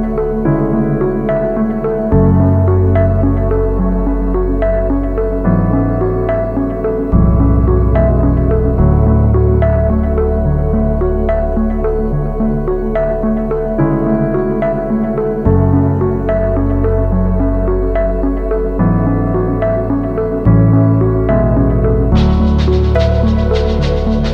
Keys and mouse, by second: 0.2 b, 1.3-2.5 shift+drag, 2.8 b, 3.8 shift+click, 4.5-5.9 shift+drag, 6.1 b, 7.1-8.4 shift+drag, 8.7 b, 9.3 shift+click, 10.7 shift+click, 11.7 b, 13.5 shift+click, 14.5 ctrl+z, 14.9-16.4 shift+drag, 16.6 a, 16.7 b, 17.5 click, 18.8 z, 19.1 Tab, 19.3-19.8 drag, 19.8 a, 20.0-21.9 drag, 22.1 shift+drag, 22.6 Tab, 23.2 2, 24.1 ctrl+e.